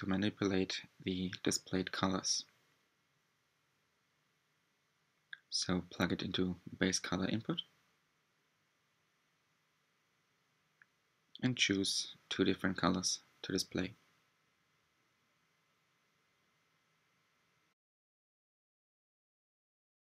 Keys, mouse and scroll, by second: 0.0 scroll up 1, 6.6-9.1 drag, 11.2 click, 13.6-14.2 ctrl+shift+drag, 17.0 click.